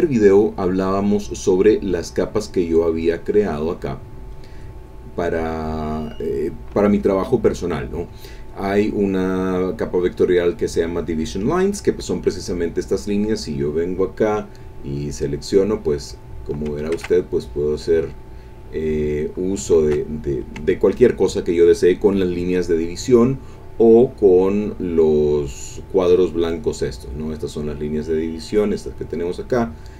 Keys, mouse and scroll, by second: 1.9-7.9 drag, 8.9 click, 13.3 click, 14.8 click, 15.8-16.8 drag, 17.0 ctrl+z, 18.7 click, 19.8 ctrl+z, 23.1 click, 23.9 click, 27.2 click, 28.0 click, 29.7-29.9 drag.